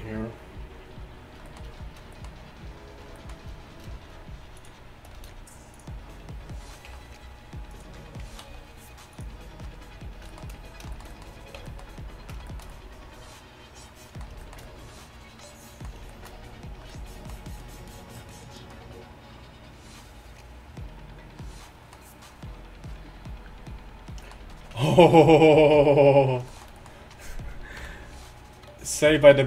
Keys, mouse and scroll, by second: 5.2 shift+a, 6.9 F6, 8.3 Tab, 8.5 s, 11.6 Tab, 18.4-19.0 middle drag, 24.6 ctrl+s, 27.9 KP_1, 29.2 z.